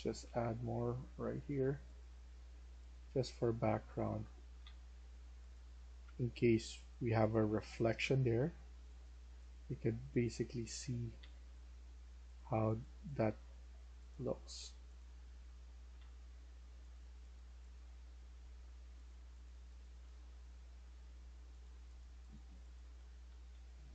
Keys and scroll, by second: 0.0-0.6 typing, 4.1-4.5 typing, 5.9 typing, 7.9 typing, 10.7-11.1 typing, 13.1 w, 14.9-15.9 typing, 17.4-18.2 typing, 19.5-20.6 typing, 21.9-23.9 typing.